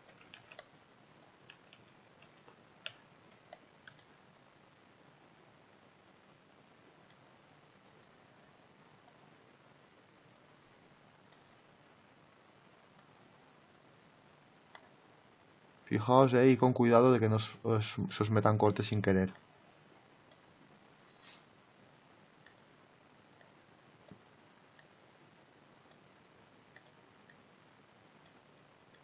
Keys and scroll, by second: 0.3 ctrl+z.